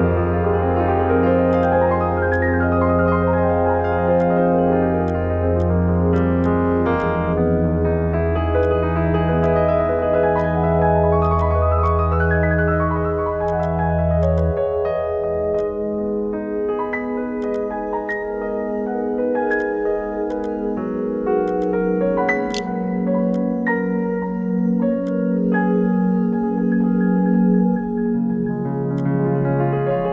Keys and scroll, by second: 21.7-22.7 typing, 22.8 ctrl+g.